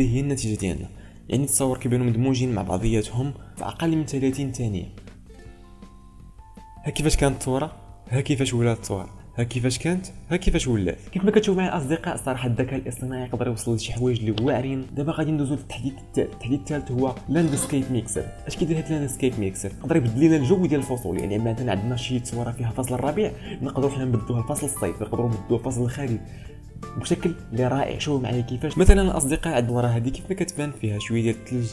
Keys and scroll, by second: 1.3 ctrl+space, 31.1 ctrl+space.